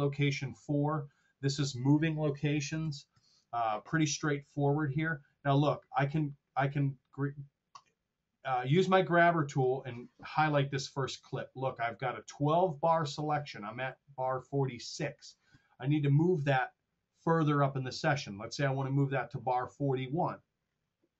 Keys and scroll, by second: 2.8 r.